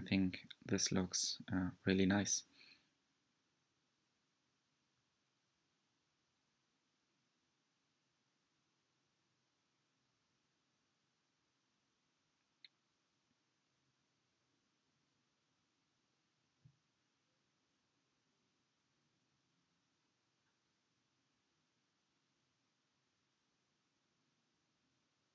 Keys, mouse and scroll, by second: 0.5 click, 2.8 scroll up 2, 3.2-6.2 middle drag, 6.2-7.0 scroll down 2, 7.0-15.5 middle drag, 15.5 click, 19.3 click, 22.9 click.